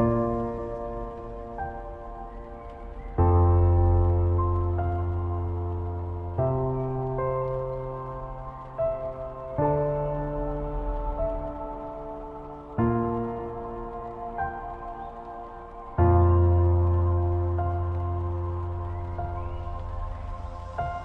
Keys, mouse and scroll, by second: 2.4 Up, 5.9 Down, 8.4 scroll down 1, 10.4 alt+scroll up 1, 11.8 Up, 14.9 Up, 15.0 alt+scroll up 1, 17.0 space, 17.1 click, 17.5 space, 18.5-19.0 alt+scroll up 1, 20.1 space, 20.2 click, 20.6 space.